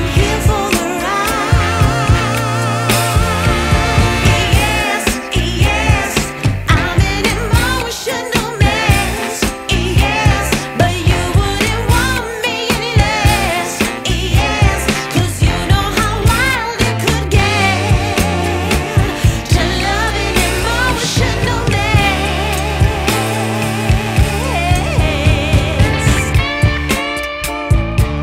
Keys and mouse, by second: 0.5 click, 0.8-3.6 typing, 0.9 click, 1.2 click, 1.5 click, 2.0 click, 2.2 click, 2.4 click, 3.0 click, 3.2 click, 6.0 space, 6.1 click, 6.5 space, 6.7 click, 6.9 space, 7.0 click, 8.1 ctrl+a, 11.7 click, 17.8 click, 17.8 click, 19.9 click, 21.8 click.